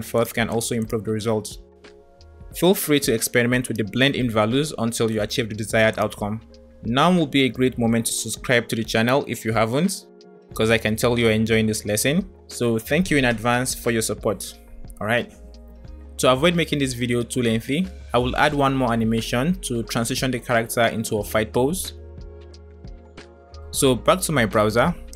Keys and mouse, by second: 0.2 click, 0.7-2.4 drag, 3.2 space, 6.6 space, 13.7 space, 20.0-23.4 drag.